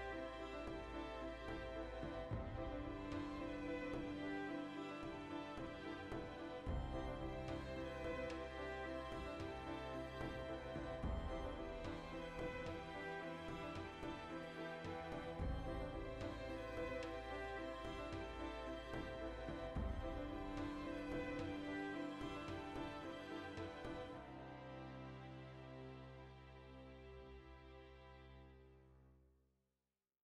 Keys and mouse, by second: 0.4 Tab, 4.8 ctrl+r, 5.7-6.7 drag, 5.9 ctrl+r, 6.8-9.7 shift+middle drag, 8.0 ctrl+z, 9.7 right click, 10.0 click, 10.6 ctrl+r, 11.5-15.6 ctrl+middle drag, 12.6 ctrl+r, 13.2 click, 14.2 Tab, 15.6 click, 15.9 Tab, 16.0-17.1 shift+middle drag, 17.1 alt+right click, 17.3-18.3 middle drag, 18.3 alt+shift+right click, 18.9-20.4 shift+middle drag, 20.4 alt+shift+right click, 20.8-22.4 ctrl+middle drag, 22.4 alt+shift+right click, 22.6 middle click, 23.6 alt+shift+right click, 24.0-25.9 middle drag, 25.9 alt+shift+right click, 26.1-27.5 shift+middle drag, 27.5 alt+shift+right click, 27.7-30.2 middle drag.